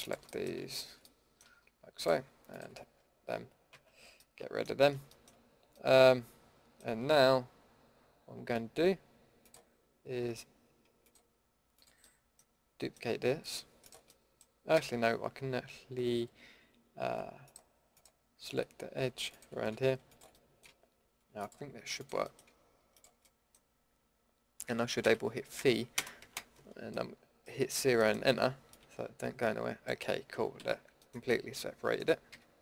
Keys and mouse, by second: 1.0 middle drag, 3.7 ctrl+x, 12.0-14.7 middle drag, 14.7 a, 22.2-25.0 middle drag, 25.0 v, 26.9-28.3 drag, 28.7-29.8 middle drag, 30.6 ctrl+z, 32.3 a.